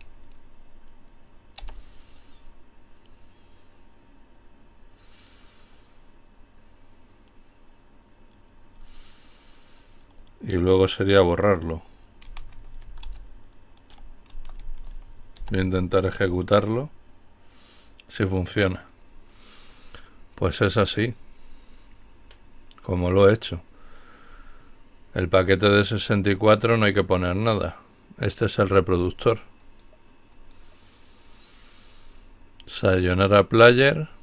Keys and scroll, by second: 0.6 Return, 11.4-14.4 typing, 14.5 Return.